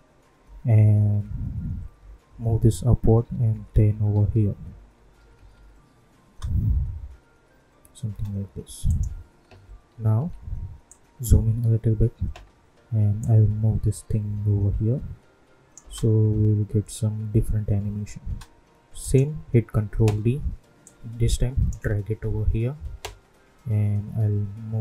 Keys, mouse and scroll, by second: 0.4 Up, 3.0 Left, 4.9 Up, 6.2 space, 8.8 click, 9.9 =, 10.1 =, 10.8-15.8 drag, 15.8 space, 18.2 space, 19.0 click, 19.8 ctrl+d, 20.8-23.4 drag, 23.4 Right.